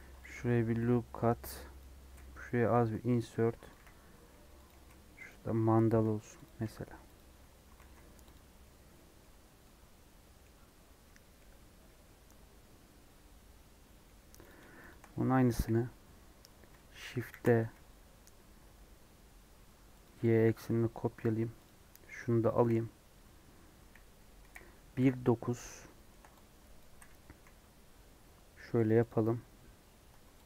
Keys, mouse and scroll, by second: 1.0 3, 1.7 click, 2.7 i, 3.7 e, 4.7 g, 6.0 g, 6.6 r, 7.3 Tab, 7.7 alt+z, 7.9 scroll down 1, 8.3 Left, 8.4 scroll down 1, 8.6 middle click, 9.6-10.9 middle drag, 10.9 scroll down 1, 11.3-14.4 middle drag, 14.4 click, 14.8 shift+click, 15.5 KP_1, 15.9 KP_3, 16.7 shift+middle click, 17.2 shift+d, 20.2 click, 20.4 scroll down 1, 20.6 middle click, 21.6 click, 22.5 KP_1, 23.1 KP_3, 24.1 KP_3, 24.9 KP_9, 25.5 Tab, 25.9 shift+middle click, 26.7 click, 26.8 g, 29.0 click, 30.0 Tab, 30.4 click.